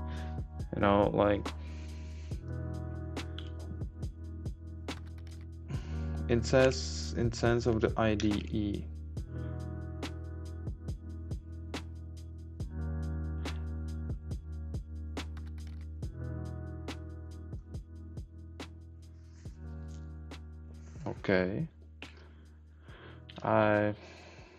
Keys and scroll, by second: 3.4 Left, 6.6 Right, 8.1 Down.